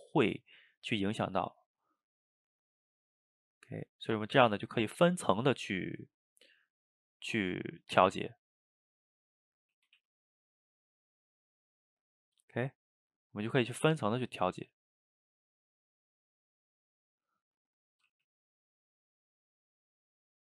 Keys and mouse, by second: 0.5 f, 0.9 middle click, 1.7-2.7 drag, 2.7 middle click, 3.2-5.5 drag, 5.5-6.7 middle drag, 6.7-8.4 drag, 8.4 middle click, 8.9 click, 9.7 middle click, 10.0 ctrl+z, 10.4 click, 11.3 middle click, 11.8-13.1 drag, 13.1-14.7 middle drag, 14.7 click, 15.4 middle click, 16.1 click, 16.7 middle click, 17.2 click, 17.4 middle click, 18.1 f, 18.7 click, 19.5 middle click, 20.1 click.